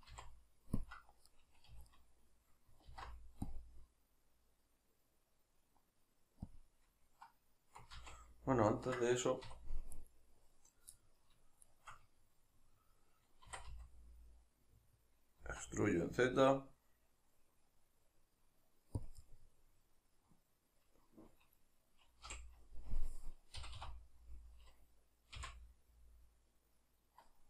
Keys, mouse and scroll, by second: 0.1 x, 1.7 a, 2.9 alt+e, 6.6 click, 7.1-9.9 middle drag, 7.9 ctrl+z, 9.5 2, 9.9 right click, 10.9-11.6 middle drag, 11.6 shift+right click, 12.0-19.0 middle drag, 13.4 e, 19.0 click, 19.2-27.4 middle drag, 22.3 o.